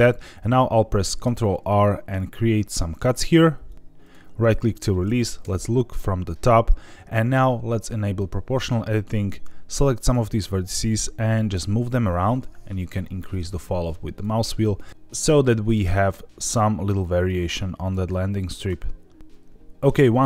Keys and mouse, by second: 1.0 ctrl+r, 4.0 right click, 5.4 KP_7, 8.1 click, 9.3 click, 10.0 click, 11.5 g, 14.1 click, 14.7 click, 15.0 ctrl+z, 15.0 click, 15.0 g, 15.6 click, 15.9 g, 16.3 click, 17.3 g, 17.8 click, 18.5 click, 18.6 g.